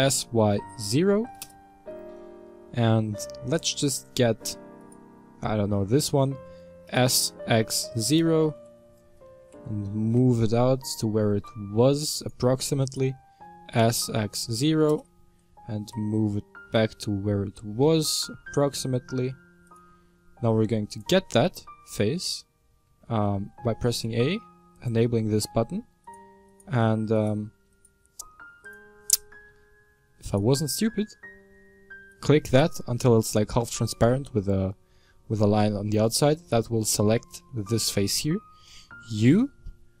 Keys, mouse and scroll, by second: 4.7 alt+right click, 6.3 s, 9.3 g, 12.7 alt+right click, 13.4 s, 15.7 g, 21.3 right click, 22.7 a, 25.9 shift+right click, 26.3 shift+right click, 27.0 right click, 27.6 right click, 28.6 click, 29.4 a, 30.1 shift+right click, 32.0 right click, 32.3 right click, 35.8 middle click, 36.3-37.2 scroll up 5, 37.4-40.0 middle drag.